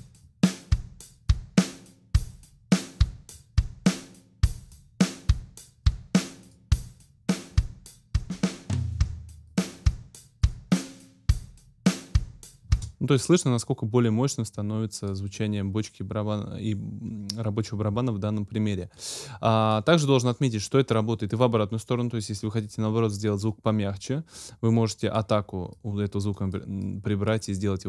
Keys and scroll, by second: 12.7 space.